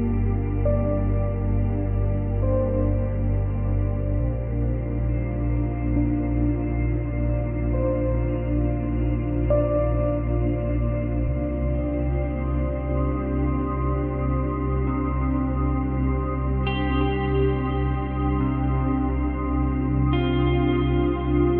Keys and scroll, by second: 12.3 space, 14.4 space, 17.0 space, 17.9 space.